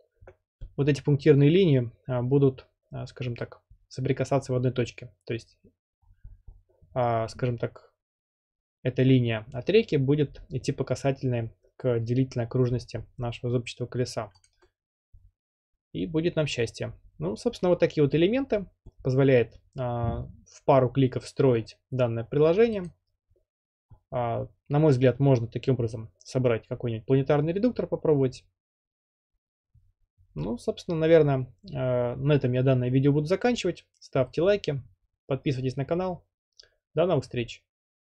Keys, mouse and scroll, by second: 0.6 scroll down 10, 0.7 middle click, 0.8-2.1 middle drag, 0.8-2.0 scroll, 2.0 scroll, 6.0 scroll up 1, 6.0-6.7 scroll, 12.7 scroll up 6, 13.0 scroll, 13.5-13.9 scroll up 7, 14.3 scroll, 14.5 click, 15.3 scroll, 16.3 middle click, 22.9-24.0 drag.